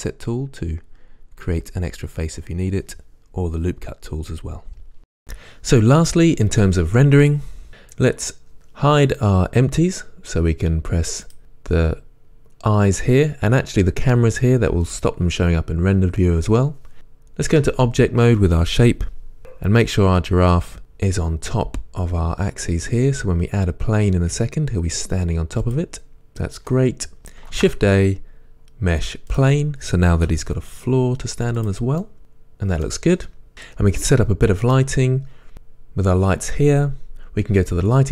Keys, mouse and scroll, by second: 3.5-4.5 middle drag, 3.5 scroll, 4.6-7.5 shift+middle drag, 11.4 click, 14.2 click, 15.0-17.7 drag, 17.7 Tab, 20.8 KP_1, 24.5 g, 25.9 click, 26.1-31.7 middle drag, 29.5 shift+a, 30.5 s, 31.8 click, 33.5-34.9 shift+middle drag, 34.9 click.